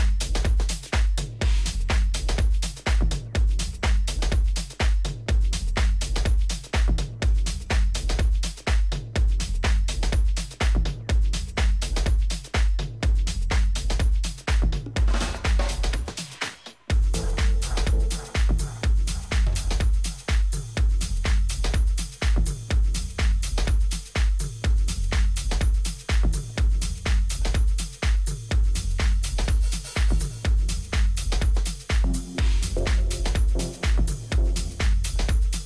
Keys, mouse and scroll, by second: 0.3-3.8 middle drag, 3.8 a, 4.9 b, 6.8 g, 9.2 a, 9.5-11.5 middle drag, 12.0 a, 16.2-17.9 middle drag, 16.6 a, 17.9 b, 20.3 g, 22.8 a, 23.5 z, 26.3 middle click, 29.9-34.0 middle drag, 34.4 middle click, 35.2-35.6 right drag.